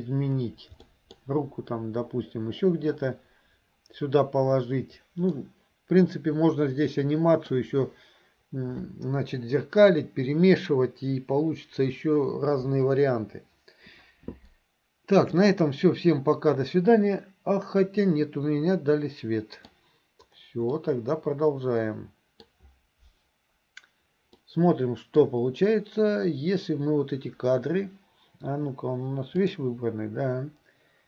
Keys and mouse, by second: 0.9 middle click, 5.4-7.5 middle drag, 15.5-19.7 middle drag, 20.8-22.5 middle drag, 24.4 middle click, 29.5 click.